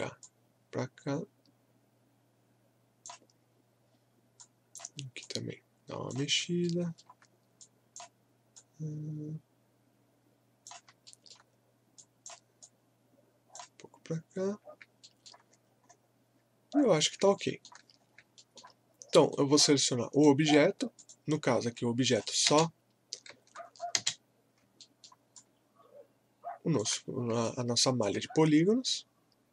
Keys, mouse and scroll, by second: 6.6 alt+middle click, 7.6-11.0 drag, 11.0 alt+middle click, 12.0-14.6 drag, 14.6 scroll down 1, 15.0 alt+middle click, 15.5 scroll up 1, 17.4 alt+middle click, 18.0 scroll up 1, 18.4 alt+middle click, 19.3-20.9 right drag, 20.9 click, 22.5 space, 23.6 scroll down 1, 23.9 space, 24.8 alt+middle click, 25.4-28.9 alt+drag, 28.9 scroll down 1.